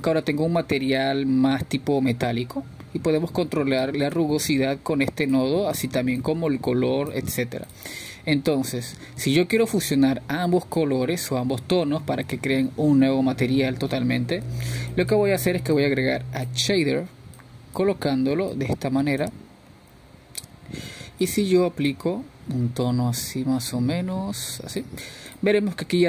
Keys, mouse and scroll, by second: 4.3-7.3 drag, 7.4-9.4 drag, 11.0 click, 12.9-14.9 drag, 18.2-19.8 drag, 20.7 click, 21.7 click, 25.2 click.